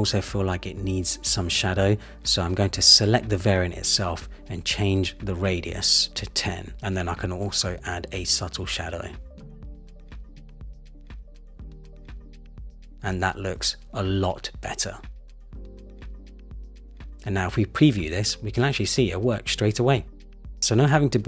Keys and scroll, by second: 4.1 shift+Down, 12.5 Return.